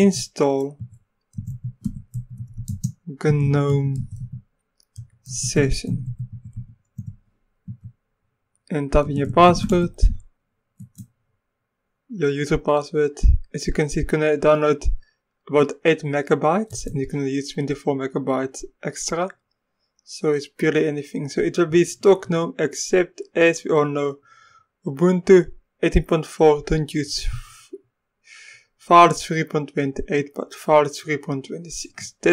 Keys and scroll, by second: 0.0-7.5 typing, 7.7 Return, 8.8-10.4 typing, 10.8 Return, 16.7 Return.